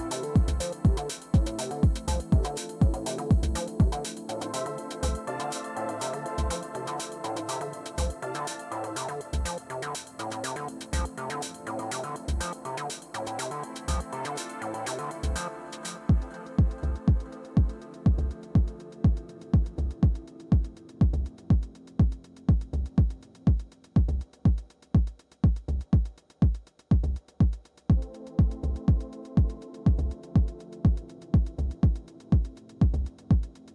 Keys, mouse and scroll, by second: 0.0-6.3 typing, 10.0 Return, 13.0-19.3 typing, 19.5 Return, 26.5 Return, 28.2 Return, 30.8-33.7 typing.